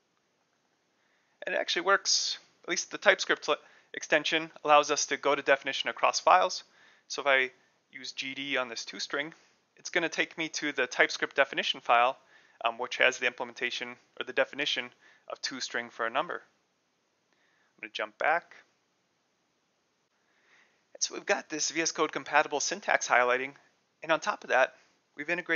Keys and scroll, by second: 0.0-0.4 typing, 8.3-9.2 typing, 17.4 ctrl+o, 17.7 ctrl+o.